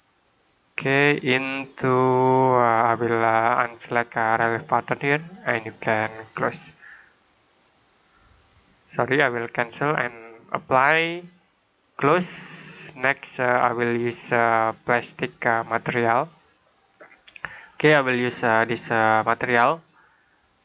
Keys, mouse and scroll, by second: 4.5 click, 9.4 click, 14.6 click, 19.1 click.